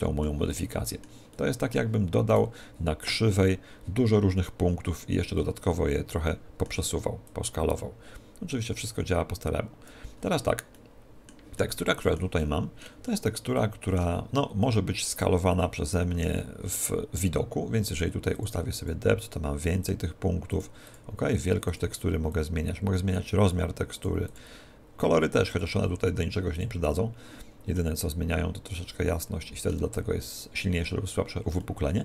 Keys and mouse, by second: 2.3 right click, 5.4-7.3 middle drag, 7.3 click, 10.2-15.2 middle drag, 14.6 s, 15.4 middle click, 18.4-28.3 drag, 27.8-29.6 middle drag, 31.6-32.0 middle drag.